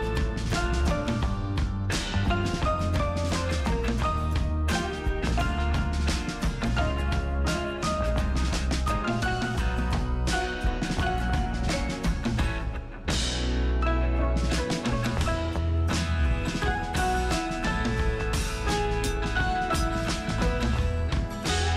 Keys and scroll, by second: 7.8 space, 11.0 space, 11.6 alt+space.